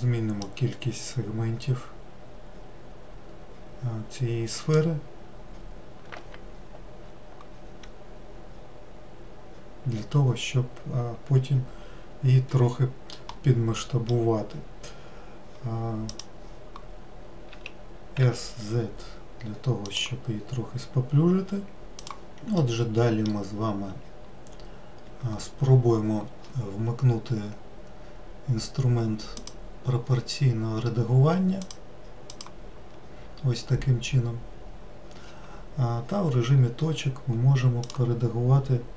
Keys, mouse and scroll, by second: 0.6-3.7 drag, 13.4-16.2 middle drag, 16.2-17.7 drag, 17.7 s, 22.3-24.6 middle drag, 24.6-28.1 scroll up 2, 29.6-31.9 drag, 32.6 click, 38.0 click.